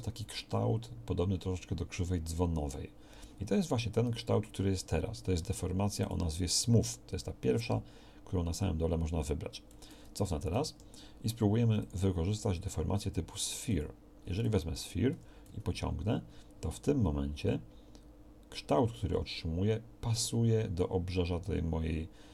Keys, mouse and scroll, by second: 10.5 ctrl+z, 15.1 g.